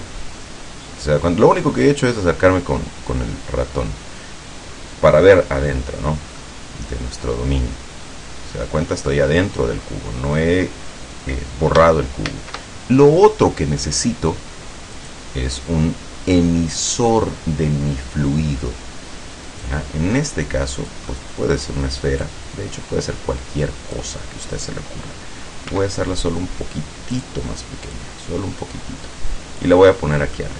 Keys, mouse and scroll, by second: 0.4-0.8 scroll down 2, 1.2-1.6 scroll down 2, 1.8 scroll down 2, 2.4-3.0 scroll up 2, 3.2 scroll up 1, 3.8 scroll up 1, 6.5-10.6 middle drag, 12.4 shift+a, 15.0 click, 19.7-21.2 drag, 21.2-22.1 middle drag, 22.3-24.2 drag, 25.8 s, 27.2 click, 28.0-29.9 drag, 30.0-30.5 middle drag.